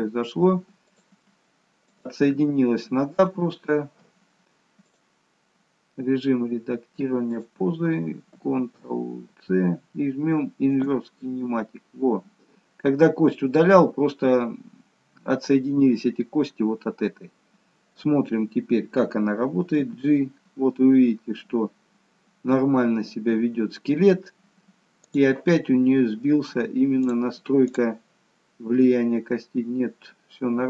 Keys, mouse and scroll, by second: 0.9 click, 1.9 shift+click, 2.6 shift+click, 4.9 click, 10.8 ctrl+shift+c, 11.9 scroll down 1, 19.8 g, 26.9 click, 27.6 click.